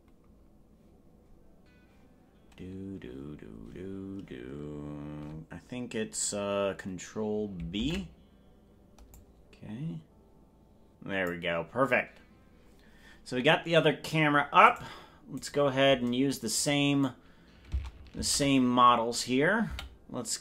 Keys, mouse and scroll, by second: 7.9 ctrl+b, 9.1-11.3 drag, 14.9 right click, 15.7 right click, 18.3 ctrl+Tab, 19.9 a.